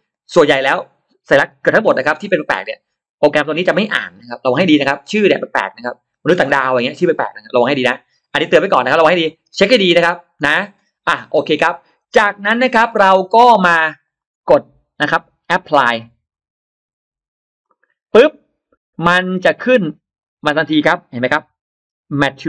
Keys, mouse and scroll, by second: 13.9 right click, 14.0 right click, 15.8 click, 17.5 click, 19.6 click, 21.7 ctrl+alt+scroll up 1, 21.8 ctrl+alt+middle click.